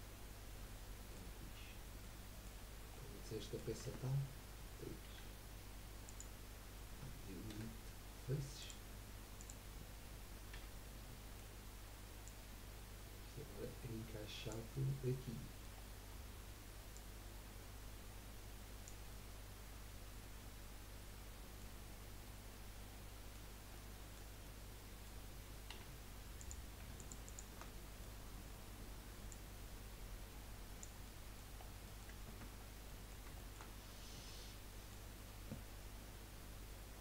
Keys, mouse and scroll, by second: 1.5-2.0 scroll down 3, 2.0-2.6 middle drag, 2.6-2.9 scroll up 2, 2.9-3.8 middle drag, 3.8 Tab, 5.1 3, 6.0 click, 7.5 Delete, 9.4 click, 10.5 l, 10.9-12.2 middle drag, 12.2 click, 14.7-15.8 middle drag, 15.8-16.5 scroll up 1, 16.9 click, 19.1-21.7 middle drag, 21.7 scroll up 2, 22.2-23.5 middle drag, 23.5 scroll up 1, 23.7-25.7 middle drag, 26.9 alt+shift+click, 27.2 alt+shift+click, 27.8 middle click, 28.5 scroll up 2, 29.3 click, 31.2 middle click, 31.6-32.0 scroll down 4, 32.0 middle click, 32.3 Tab, 32.6 scroll down 2, 32.8-33.8 middle drag, 33.8-34.3 scroll down 3, 34.3-35.7 middle drag, 35.7-36.4 scroll down 6, 36.4-37.0 scroll down 1.